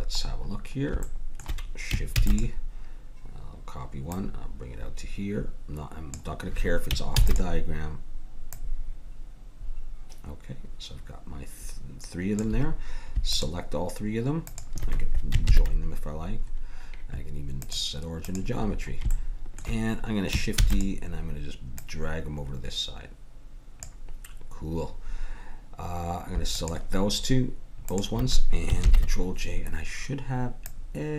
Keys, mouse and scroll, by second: 2.3 shift+d, 4.1-5.4 drag, 5.7 click, 7.2 shift+d, 8.9-10.2 drag, 13.3-14.5 drag, 15.5 ctrl+j, 18.7 click, 19.4-20.6 middle drag, 20.6 shift+d, 21.8-23.4 drag, 26.5-30.3 drag, 28.8 ctrl+j, 30.7-31.1 drag.